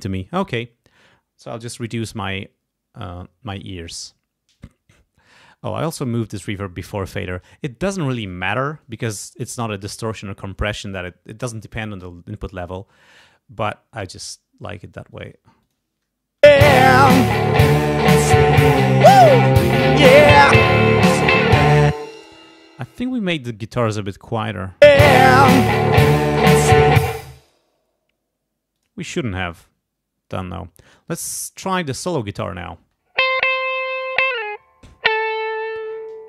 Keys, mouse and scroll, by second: 4.5 click, 5.3-6.8 drag, 15.1 click, 15.6 click, 16.4 space, 18.7 scroll down 2, 21.9 space, 23.7 click, 24.8 space, 27.0 space, 27.2 click, 28.7 click, 31.7 click, 32.5 click, 32.7 space, 33.9 click.